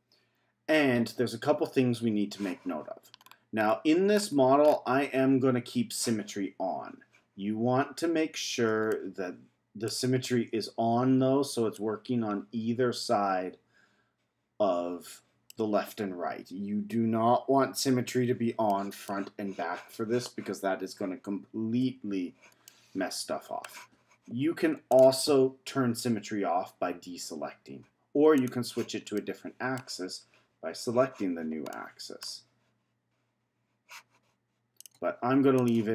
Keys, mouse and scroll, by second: 3.1-7.7 scroll down 13, 8.9-11.7 middle drag, 11.7-14.7 drag, 18.6-21.7 middle drag, 22.0 z, 22.6-24.9 middle drag, 24.9 click, 28.3 click, 29.1-34.7 middle drag, 34.8 click, 35.5 click.